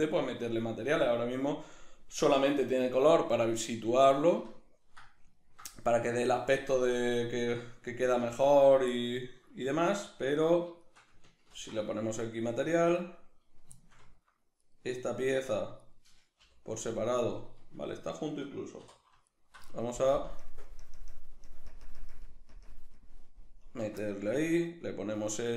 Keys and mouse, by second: 1.7 right click, 3.9-6.8 middle drag, 6.8 right click, 7.2-10.0 shift+middle drag, 10.0 shift+right click, 10.8 shift+right click, 11.5 ctrl+l, 13.8-14.6 shift+middle drag, 14.6 right click, 15.2 Tab, 15.8 right click, 16.4 l, 17.9-19.3 ctrl+middle drag, 18.8 3, 19.3 alt+right click, 20.1 ctrl+KP_Add, 21.7 ctrl+KP_Subtract, 23.5 ctrl+KP_Add.